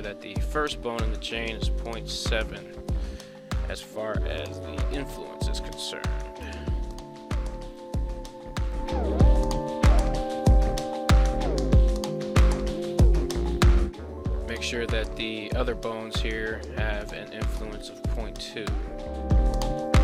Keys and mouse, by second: 3.7 right click, 4.9-6.7 drag, 7.6 right click, 8.5 click, 10.3 click, 15.1 click, 16.9-18.6 drag, 19.4 click.